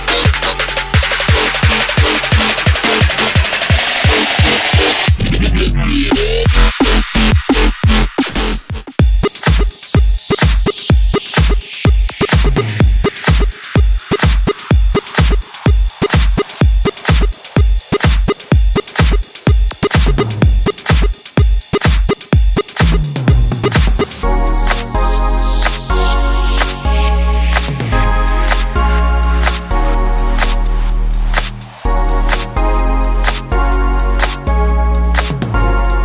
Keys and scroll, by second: 6.8 i, 24.6 h, 24.8 a.